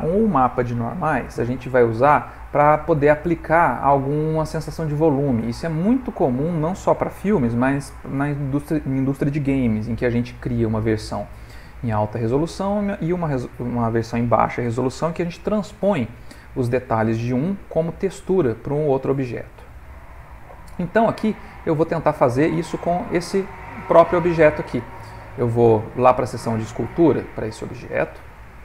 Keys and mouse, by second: 2.5 middle click, 3.4 ctrl+middle click, 3.9 shift+middle click, 10.0 ctrl+middle click, 21.4 middle click, 22.4 Tab, 23.1 Tab.